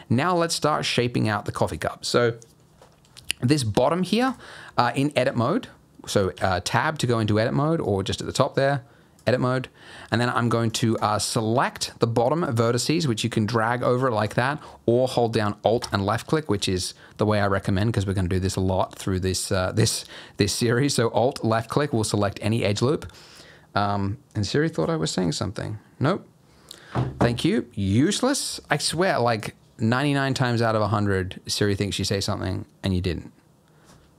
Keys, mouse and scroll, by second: 3.1-3.7 scroll up 1, 3.7 Tab, 4.2 alt+click, 5.1 Tab, 6.3 Tab, 7.8 click, 8.7 click, 10.7 click, 10.9 click, 12.3 click, 12.6 click, 13.4 click, 14.2 click, 15.8-16.5 alt+click, 21.5 alt+click, 29.3 click.